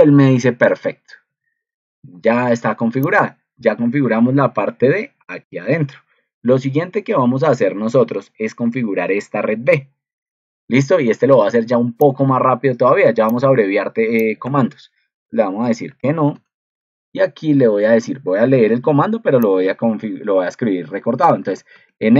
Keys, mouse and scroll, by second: 4.4 ctrl+2.